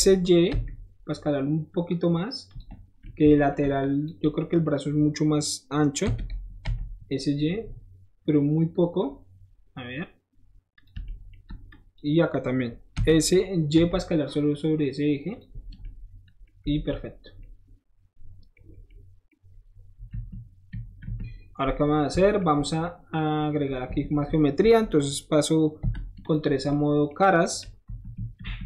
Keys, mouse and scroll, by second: 2.5 click, 2.8 middle click, 3.0 middle click, 3.5 shift+middle click, 3.8 shift+click, 10.7 click, 11.7 shift+click, 12.9 s, 15.3 click, 15.6 middle click, 15.8 middle click, 16.7 alt+z, 17.1 middle click, 17.4-18.6 middle drag, 20.2 KP_1, 20.7 KP_3, 21.0 KP_1, 22.2-23.4 shift+middle drag, 23.4-25.1 shift+middle drag, 23.8 Tab, 24.6 Tab, 25.8 3, 26.2 click, 26.5 middle click, 26.7-27.8 middle drag, 27.8 KP_1, 28.1 KP_3, 28.4 KP_1.